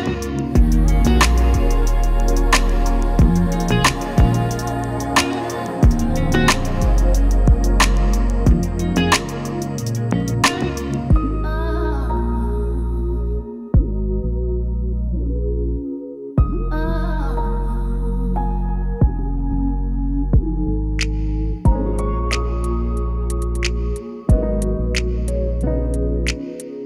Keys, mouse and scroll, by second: 7.6-10.9 drag, 13.8-20.2 drag, 20.7-21.6 typing, 22.4 click.